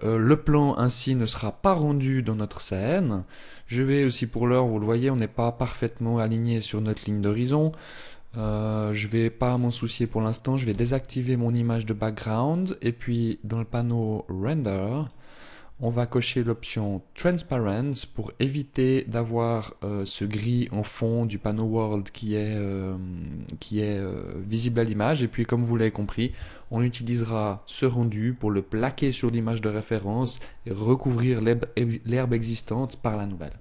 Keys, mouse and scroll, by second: 3.0 click, 9.5 click, 10.2 n, 12.7 click, 16.7 click, 22.0 click.